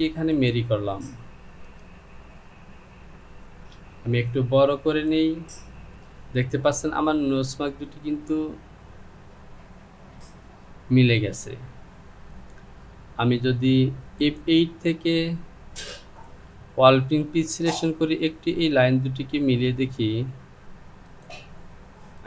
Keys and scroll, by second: 4.0 Return.